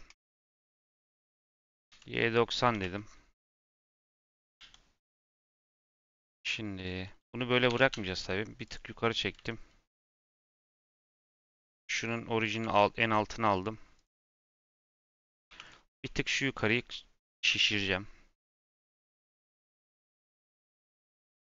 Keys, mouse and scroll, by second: 0.2 r, 5.9 click, 7.6 g, 10.5 click, 11.4-12.4 drag, 12.4 n, 13.5 click, 13.9 click, 14.1 Tab, 15.4 3, 15.6 click, 15.9 s.